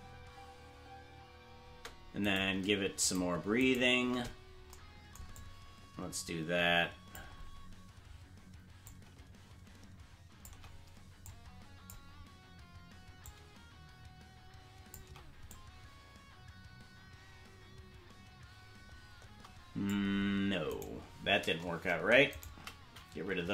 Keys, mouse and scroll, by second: 2.4 right click, 2.4 space, 3.1 shift+right click, 4.3 right click, 5.3-7.1 drag, 8.8-10.4 drag, 11.2 click, 13.2-14.9 drag, 15.4-19.9 drag, 22.3 shift+right click, 23.4 Delete.